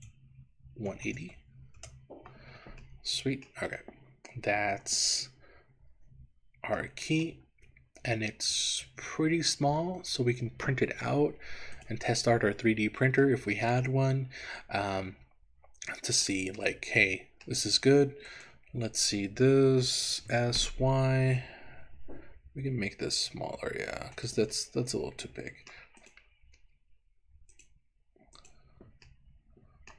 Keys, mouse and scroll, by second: 0.9 KP_1, 1.2 KP_8, 1.3 KP_0, 1.8 KP_Enter, 2.9 middle click, 3.8 scroll up 1, 4.0-5.3 scroll down 8, 5.8-6.8 scroll down 1, 6.9 shift+middle click, 7.6-8.4 scroll up 5, 8.6 click, 11.1 Tab, 11.8 click, 12.8 Tab, 13.4-16.4 middle drag, 16.7 middle click, 18.4 click, 20.3 s, 20.9 y, 24.2 click, 24.6-25.8 middle drag, 26.1 click, 27.5 click, 28.4 click, 29.2 middle click.